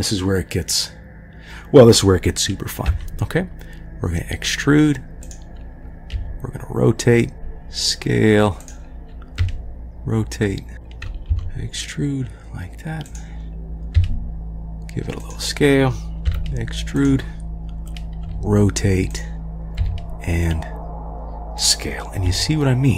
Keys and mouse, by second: 2.9 e, 6.1 r, 7.3 e, 7.3 s, 9.4 r, 11.1 e, 13.9 s, 16.3 e, 18.2 r, 19.8 s, 22.2 g.